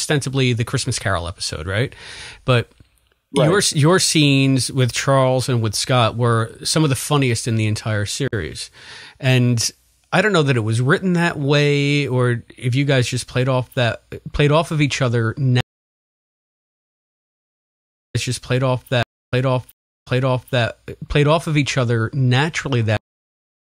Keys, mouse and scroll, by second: 0.7 click, 1.1 click, 2.0 click, 2.5-4.5 drag, 4.9 click, 5.7 ctrl+s, 6.8-7.9 drag, 8.2 Delete, 10.0 click, 10.7 click, 11.4 ctrl+s, 12.2-14.6 drag, 15.0 click, 15.5 space, 16.0 click, 16.7 click, 18.0 click, 18.0-20.0 typing, 19.2 click, 19.9 click, 20.5-22.9 drag, 22.9 space, 23.7 ctrl+shift+Delete.